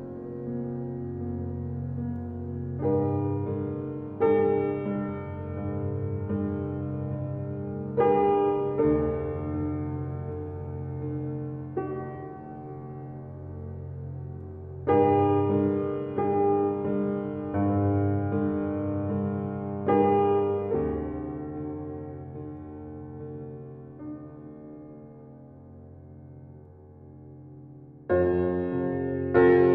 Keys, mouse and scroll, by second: 4.0 click, 8.5-10.2 scroll up 1, 10.2 right click, 11.0 click, 21.4 click, 29.5 click.